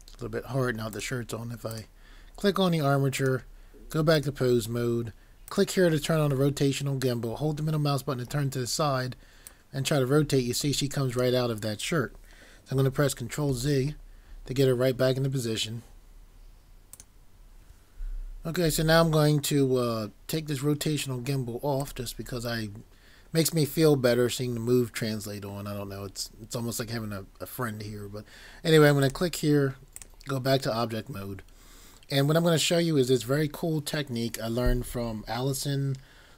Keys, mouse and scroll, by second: 6.5 middle click, 9.5 click, 16.9 click.